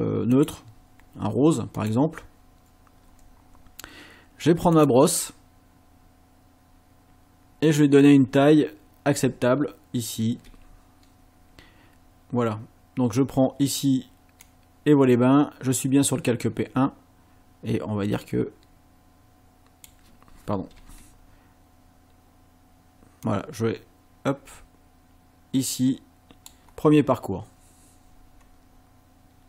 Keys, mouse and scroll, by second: 0.3 click, 1.8 click, 4.8 click, 7.8 click, 9.4-10.2 ctrl+scroll up 4, 11.0 scroll up 2, 14.4-20.0 drag, 20.8 ctrl+z, 23.2-26.6 drag.